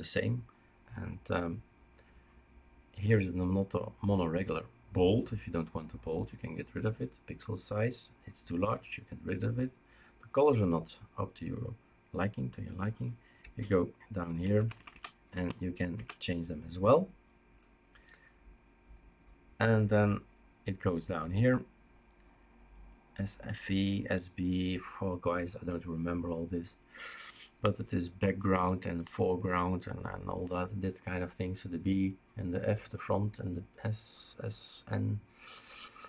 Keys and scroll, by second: 13.4 Right, 14.0 Right, 14.1 Right, 14.2 Right, 14.3 Right, 14.4 Right, 14.5 Right, 14.7 Right, 14.9 Right, 15.3 Right, 15.9 Right.